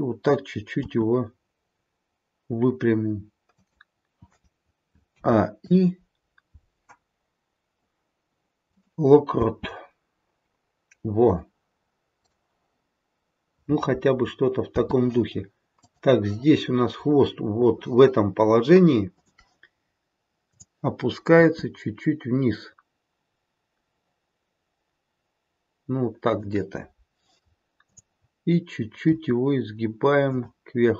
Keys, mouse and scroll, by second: 0.8 r, 5.0 a, 5.5 i, 9.5 space, 12.2 click, 14.7 space, 15.7 click, 19.2 click, 20.5 click, 21.4 r, 27.8 click, 29.1 r.